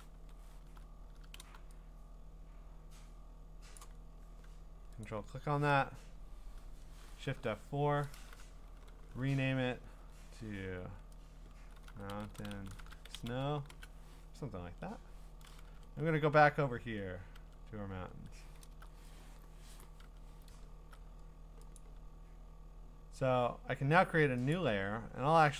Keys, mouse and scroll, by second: 0.1 ctrl+d, 1.4 b, 3.8 click, 5.0 ctrl+click, 7.3 F4, 11.3-14.1 typing, 14.7 ctrl+Tab, 15.7 Tab, 16.8 ctrl+Tab, 17.4 ctrl+Tab, 17.9 ctrl+Tab, 18.7 scroll down 1, 18.9 scroll, 20.0 Tab, 21.8 click, 24.5 click.